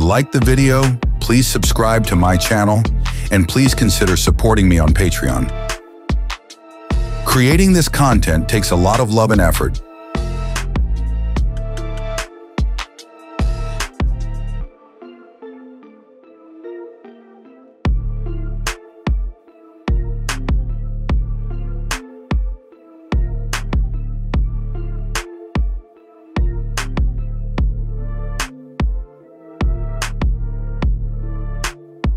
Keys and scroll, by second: 6.4 ctrl+v.